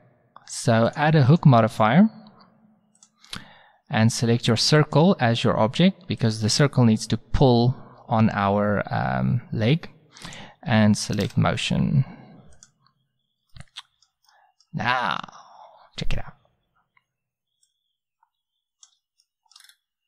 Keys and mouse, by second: 0.9-3.5 drag, 4.8-6.7 drag, 10.3-12.2 drag, 13.5-15.2 middle drag, 15.2 z, 17.7-18.6 drag, 19.2-19.8 middle drag.